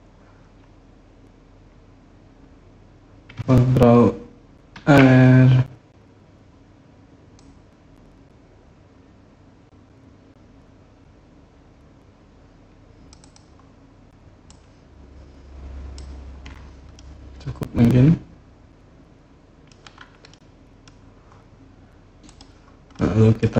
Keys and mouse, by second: 4.5 ctrl+r, 13.0 click, 14.3-15.7 drag, 16.8-19.5 middle drag, 20.1 click, 22.0 click, 22.8 click.